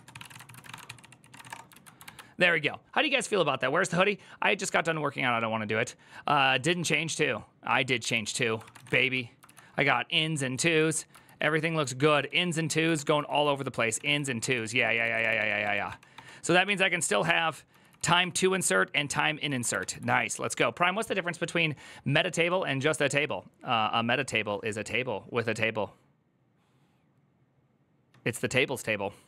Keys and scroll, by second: 0.0-1.6 typing, 7.9 alt+{, 8.3-9.1 typing, 9.2 ctrl+u, 10.9 ctrl+u, 11.8 ctrl+d, 11.9 ctrl+d, 12.7-15.4 typing, 15.4 ctrl+d, 15.9 ctrl+d, 17.2-19.2 typing, 19.6 alt++.